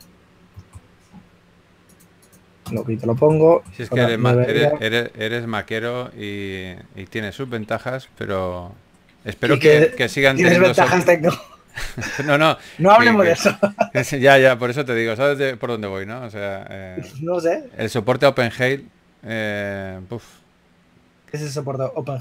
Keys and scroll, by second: 17.6 typing.